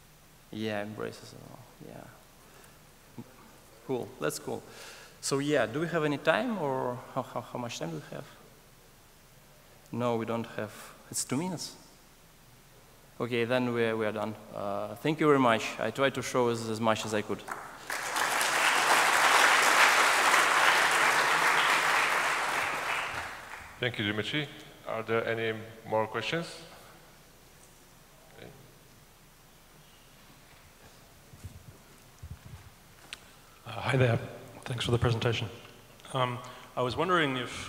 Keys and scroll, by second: 2.3 super+z, 3.5 super+z, 4.1 super+z, 4.9 super+z, 5.8 Escape.